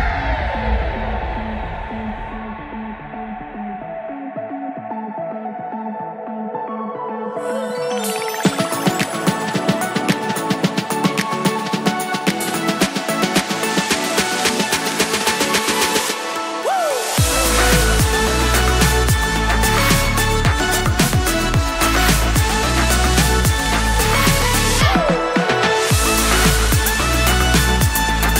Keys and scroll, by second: 0.5 shift+super+Left, 0.7 super+c, 0.9 super+v, 1.1 super+Left, 2.6 super+Right, 2.9 super+s, 6.4 super+Left, 7.1 shift+super+Right, 7.2 super+c, 8.8 super+v, 9.2 super+Left, 9.6 super+Right, 14.0 super+Right, 18.3 super+Right, 20.5 super+s.